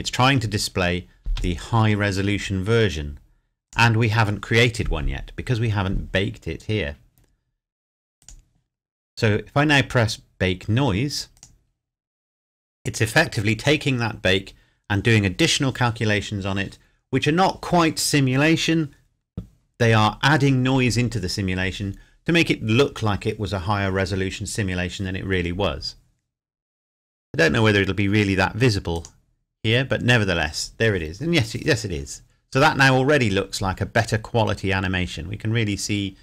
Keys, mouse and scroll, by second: 1.2 space, 3.6 click, 8.2 click, 11.3 click, 28.9 click.